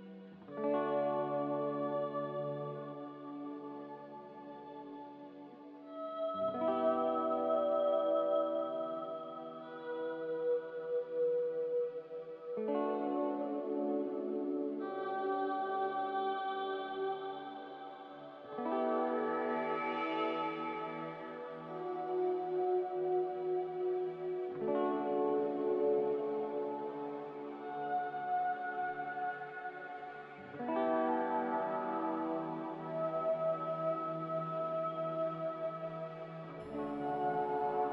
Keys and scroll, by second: 2.6 ctrl+c, 5.8 ctrl+v, 6.3 ctrl+g, 19.8 x, 20.6 z, 22.9-24.4 typing, 26.2-27.0 typing, 28.8-29.5 typing, 32.0 z, 34.5-35.3 typing.